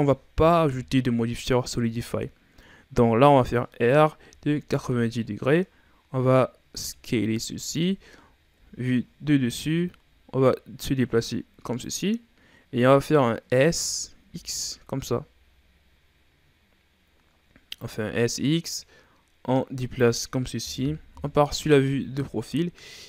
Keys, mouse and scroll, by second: 0.5 KP_1, 1.8-2.4 scroll down 3, 2.4-3.6 scroll up 2, 3.7 r, 6.7 s, 8.5 KP_7, 9.7-10.4 shift+scroll up 4, 10.4-13.4 drag, 13.4-13.7 scroll up 1, 13.7 s, 18.7-20.7 drag, 20.7 KP_3, 21.9-22.5 ctrl+scroll down 1, 22.5-23.0 scroll up 3.